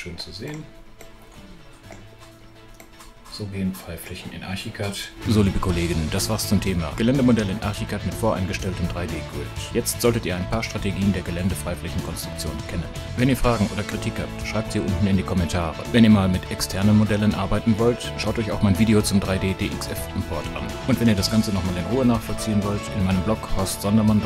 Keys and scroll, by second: 21.5 BackSpace, 22.1 alt+BackSpace.